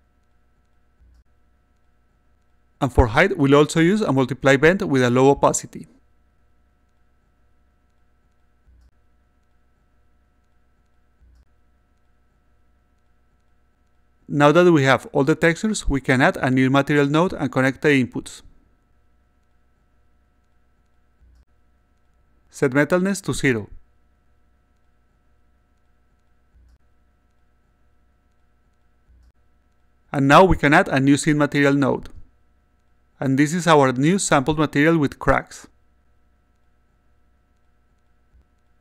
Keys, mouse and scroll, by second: 0.1-2.3 drag, 3.5 click, 3.9-5.4 drag, 5.8 click, 7.4-8.7 drag, 10.4 click, 10.8 click, 12.7-13.7 drag, 15.2 click, 16.5 click, 18.6 click, 20.2 click, 22.0 click, 22.4 click, 23.3 click, 24.0 0, 26.4-28.0 drag, 28.8 click, 30.9 click, 32.4 click, 34.2-36.9 alt+drag.